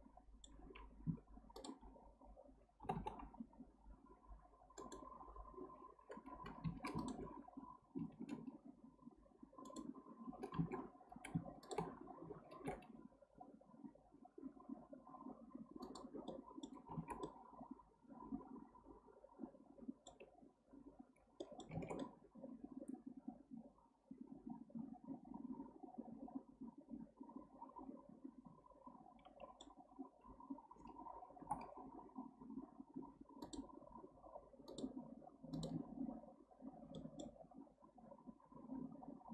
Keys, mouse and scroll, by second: 1.1 1, 1.6 drag, 2.8 g, 7.0 alt+click, 8.2 ctrl+b, 10.6 alt+z, 11.6 shift+drag, 12.6 ctrl+b, 16.3-17.0 middle drag, 17.0 alt+z, 17.2-20.3 middle drag, 20.3-21.4 scroll up 2, 21.4 middle click, 21.8 alt+z, 22.0-25.0 middle drag, 36.9-39.3 middle drag.